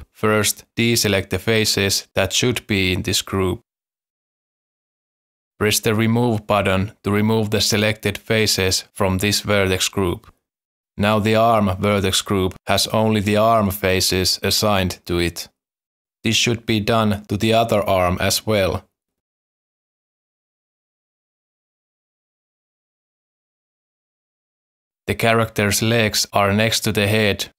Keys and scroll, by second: 11.9 alt+a, 15.7 alt+a, 22.1 z, 22.6 z.